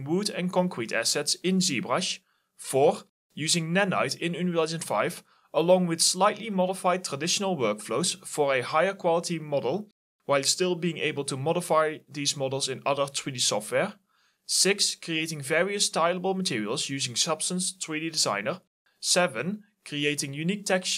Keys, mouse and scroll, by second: 0.7 alt+click, 1.6 alt+click, 3.3 alt+click, 4.4 alt+click, 5.6 1, 5.8 Return, 9.0-9.8 typing, 10.6 alt+middle click, 11.4 alt+click, 11.9 alt+middle click, 12.1 alt+right click, 12.2 alt+click, 12.6 alt+right click, 12.9 alt+middle click, 13.4 alt+click, 13.6 alt+right click, 13.7 alt+click, 20.0 right click, 20.2 click.